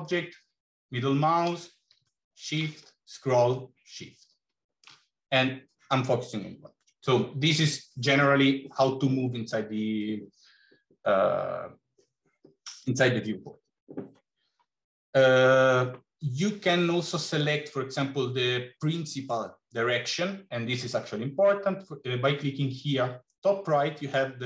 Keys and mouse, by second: 0.3-1.4 middle drag, 2.4 shift+middle click, 4.0-5.0 shift+middle drag.